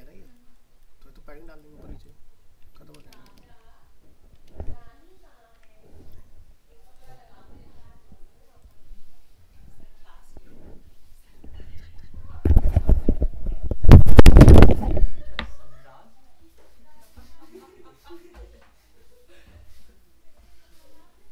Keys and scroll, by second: 3.0 ctrl+-, 4.5 ctrl+alt+0, 5.6 alt+Tab.